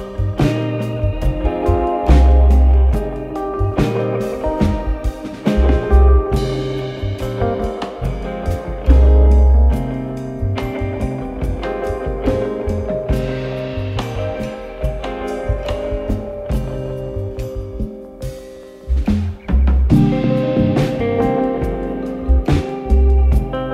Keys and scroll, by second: 2.6 f, 8.8 4, 12.2 2, 18.4-19.4 typing, 20.9-21.9 typing, 22.9-23.7 typing.